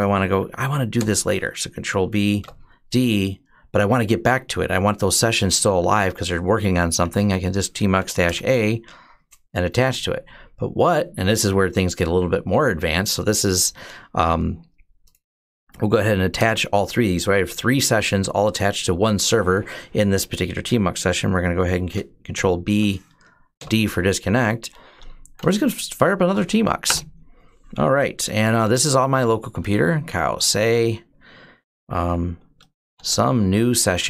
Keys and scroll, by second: 0.8 ctrl+b, 2.2 d, 6.8 Up, 7.8 a, 8.1 Return, 15.4 Up, 16.2 Return, 22.1 ctrl+b, 23.4 d, 24.9-26.7 typing, 27.9-30.5 typing, 32.3-34.0 typing.